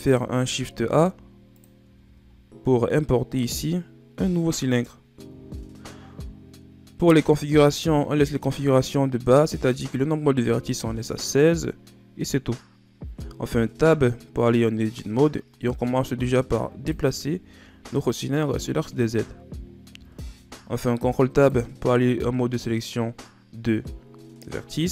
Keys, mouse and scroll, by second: 0.2-1.1 scroll up 3, 1.5 click, 1.9 shift+a, 5.4-8.5 shift+scroll down 5, 13.4 Tab, 14.6-17.6 drag, 17.6-19.8 shift+scroll up 2, 19.8 ctrl+Tab, 24.8 z.